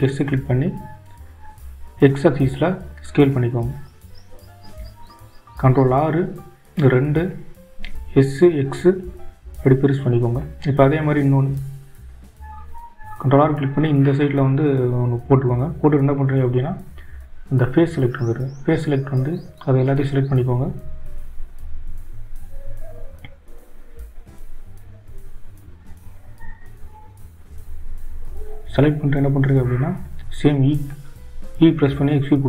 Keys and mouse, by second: 9.8 ctrl+r, 19.6 click, 21.2 click, 28.0 shift+click, 29.0 shift+click, 30.0 shift+click.